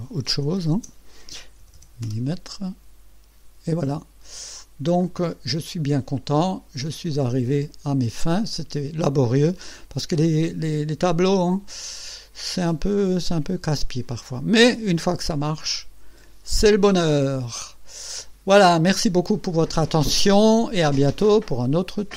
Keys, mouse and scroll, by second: 0.4 KP_3, 0.8 KP_0, 1.7 m, 2.1 Return, 5.1 click, 6.4 click, 7.4-8.8 drag, 9.0-9.7 scroll up 1, 9.7-10.5 drag, 11.2 click, 13.1 click, 14.2 scroll down 2, 15.1-16.5 drag, 16.5 right click, 17.4-19.0 drag.